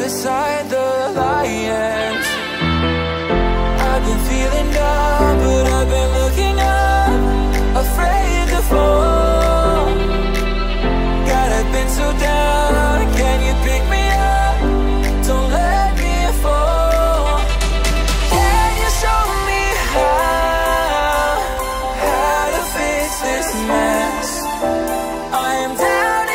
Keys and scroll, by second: 21.2 ctrl+c.